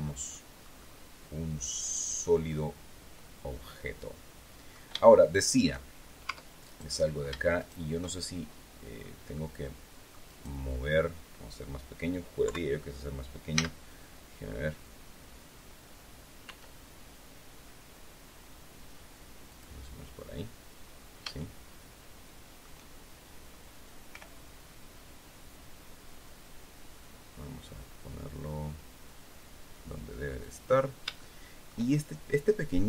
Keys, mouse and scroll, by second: 0.2-4.8 middle drag, 6.2 Tab, 6.6 right click, 7.5 shift+right click, 8.9-10.5 middle drag, 10.2 click, 10.2 right click, 12.3 KP_3, 13.4 z, 16.3 s, 19.4 click, 20.9 scroll up 1, 21.2-22.7 shift+middle drag, 24.0 g, 30.3 click, 31.1 shift+middle click.